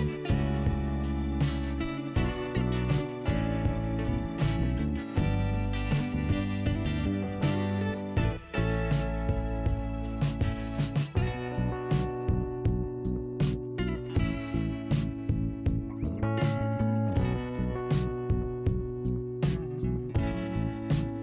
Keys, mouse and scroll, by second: 0.4 click, 2.2-2.7 scroll up 1, 2.8 click, 2.8 click, 3.9 click, 6.8 click, 7.0 click, 7.1 click, 7.1 double click, 7.2 double click, 7.3 double click, 7.4 double click, 7.5 double click, 7.6 double click, 7.7 double click, 7.8 double click, 7.9 double click, 8.0 double click, 8.1 double click, 8.2 double click, 8.3 double click, 8.3 double click, 8.4 double click, 8.5 double click, 8.6 double click, 8.7 double click, 8.8 double click, 8.9 double click, 9.0 double click, 9.1 double click, 9.1 double click, 9.2 double click, 9.3 double click, 9.4 double click, 9.5 double click, 10.5 click, 16.9 scroll up 1, 16.9 f, 17.5 click, 21.0 scroll up 1.